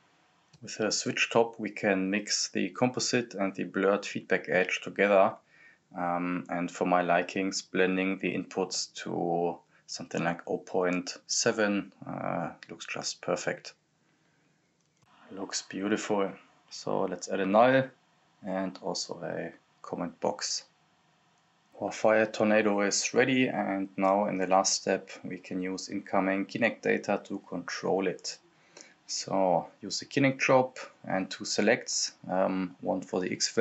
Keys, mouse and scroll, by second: 0.9-3.8 drag, 3.8-4.2 scroll up 1, 4.2 click, 5.1-5.5 scroll up 1, 5.5-10.1 drag, 10.1-10.9 scroll up 1, 10.9-11.2 scroll down 1, 12.5 click, 13.0 scroll down 1, 13.2 click, 13.9 right click, 14.4-15.2 typing, 15.2 click, 16.9 scroll down 1, 17.0 click, 17.3-18.9 typing, 17.7 click, 19.0-20.7 drag, 21.7-22.0 scroll up 1, 22.0 click, 22.7 scroll up 1, 22.8 click, 23.2-24.1 typing, 24.3 click, 25.8-26.5 scroll up 1, 26.5 click, 27.6 scroll up 1, 28.0 click, 28.2 scroll down 1, 28.5 click, 28.8 right click, 28.9-29.8 typing, 29.8 click, 30.6 ctrl+c, 30.6 ctrl+v, 31.4 click, 32.4 click, 32.4 click.